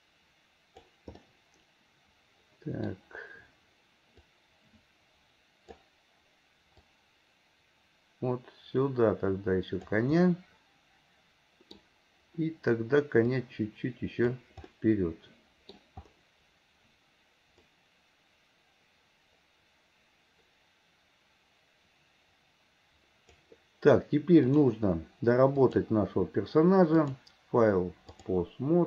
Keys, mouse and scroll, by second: 1.2-3.0 middle drag, 4.4-5.9 drag, 7.0 click, 10.2-11.8 middle drag, 11.8-12.4 scroll down 1, 12.4-13.5 scroll down 1, 13.5 click, 14.7-15.8 scroll up 1, 15.8-17.7 middle drag, 15.8-17.7 scroll down 1, 17.7-23.6 drag, 24.5 click, 25.6 click, 27.0 click.